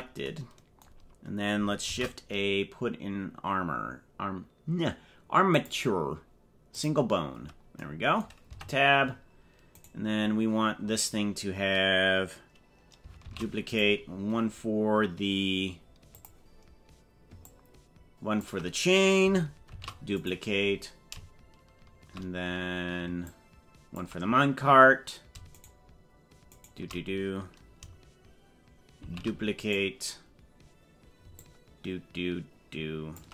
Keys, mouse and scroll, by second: 1.9 shift+a, 8.5 Tab, 9.7 right click, 11.1-11.5 scroll down 3, 13.3 shift+d, 16.1 click, 17.5-18.5 ctrl+drag, 19.7 shift+d, 23.3 ctrl+click, 25.5 shift+right click, 26.5 shift+right click, 29.0 shift+d, 31.4-33.2 ctrl+drag.